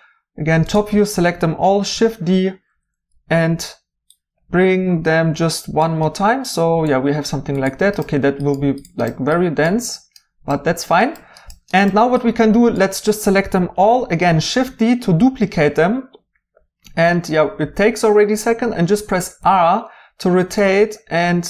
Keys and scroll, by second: 1.8 d, 14.3 d, 19.4 r.